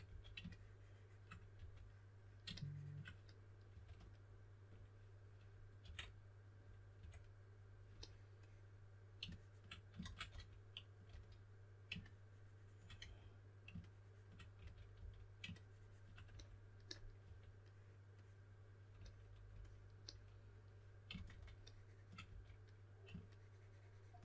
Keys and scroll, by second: 0.0 d, 1.5 4, 3.6 2, 5.8 2, 6.9 2, 9.9-11.0 typing, 12.9 d, 14.5 s, 17.1 4, 20.8-22.2 typing.